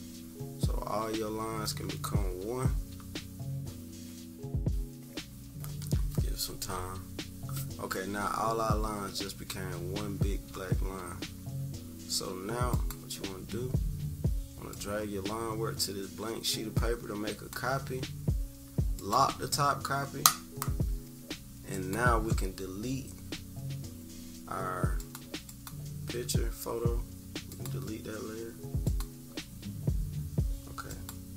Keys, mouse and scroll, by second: 12.7-19.1 drag, 21.7-22.5 drag, 24.9 click, 25.4 click, 27.5 click, 28.8 click, 30.9-31.3 drag.